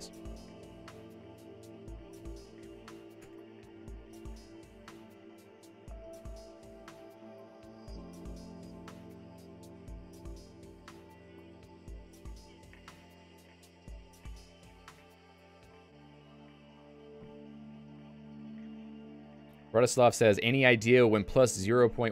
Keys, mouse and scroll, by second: 0.1 ctrl+d, 10.2 click.